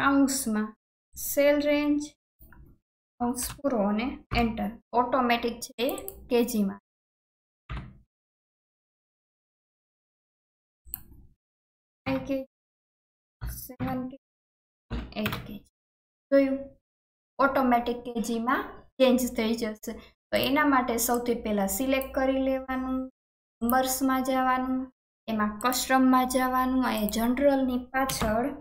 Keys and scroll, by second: 3.1 shift+9, 3.4 shift+0, 4.3 Return.